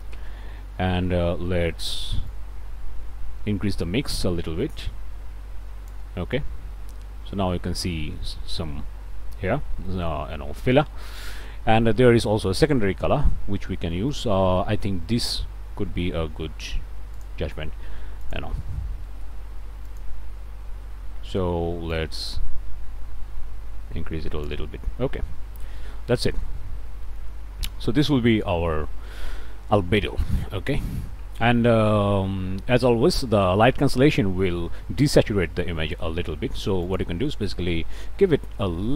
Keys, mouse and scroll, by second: 2.3-6.1 drag, 6.4 scroll up 1, 7.0 scroll up 1, 9.3-9.6 scroll up 1, 9.9 click, 10.6 scroll up 1, 11.2 click, 13.4-13.8 scroll up 1, 13.9 click, 17.2 click, 18.2 click, 19.9 click, 21.9-24.6 drag, 24.9-25.5 scroll up 1, 25.8 click, 26.5 scroll up 1, 27.0 click, 30.4 click, 36.8 click, 37.5 1, 37.8 ..